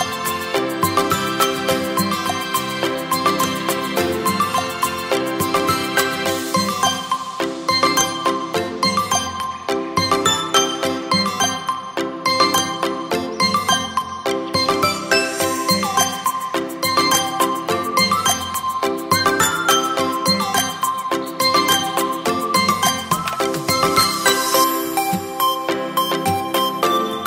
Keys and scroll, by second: 9.9 space, 10.6 space, 11.7 space, 13.9 ], 14.1 ], 16.1 v.